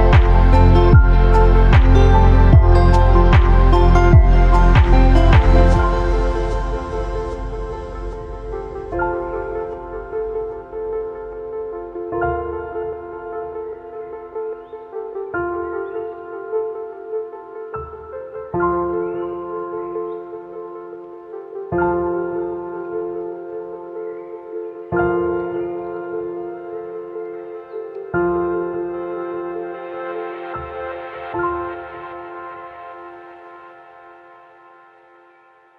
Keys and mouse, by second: 0.9 space, 2.3 space, 3.0 click, 4.2-6.1 drag, 15.6-17.1 drag, 19.1-20.5 drag, 23.6 click, 28.1-29.8 drag, 33.2 click, 34.0 click.